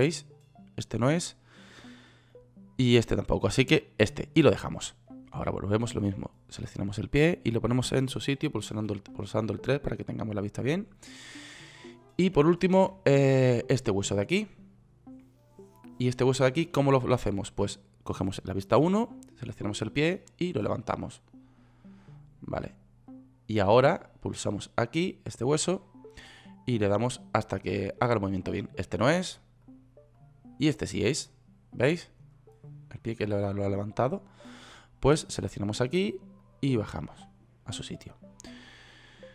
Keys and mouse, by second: 0.4-6.2 drag, 9.2 KP_3, 19.3 KP_1, 31.8-32.6 drag, 36.9-38.5 middle drag.